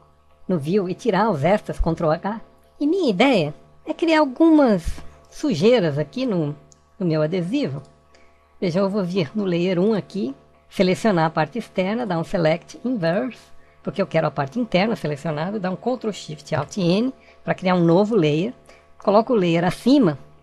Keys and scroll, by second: 15.6 ctrl+alt+shift+n.